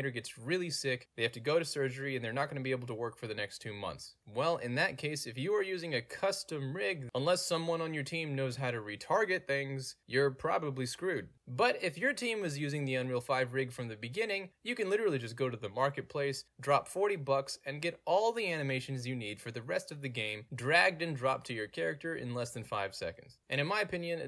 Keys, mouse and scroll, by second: 2.3 click, 3.3 click, 4.3 click, 5.3 middle click, 5.4 scroll down 2, 6.2-6.7 drag, 6.7-11.4 drag, 11.4 w, 14.5 click, 14.5 middle click, 14.6 scroll down 2, 15.5-16.0 scroll down 2, 16.3-17.8 scroll down 2, 17.8-18.8 scroll down 1, 20.5-22.2 alt+drag, 22.2 a, 22.3 click, 23.6-24.2 scroll down 2, 24.1-24.2 middle drag.